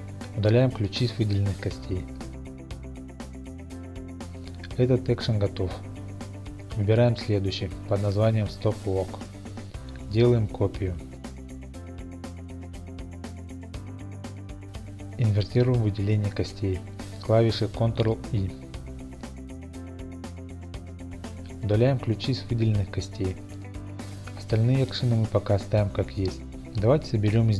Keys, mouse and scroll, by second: 1.3 x, 3.3 click, 6.6 click, 7.7 click, 8.8-9.5 scroll, 10.1 click, 10.8 click, 11.4 click, 12.3-14.0 typing, 14.3 Return, 16.5 ctrl+i, 24.5 x, 26.1-27.5 drag.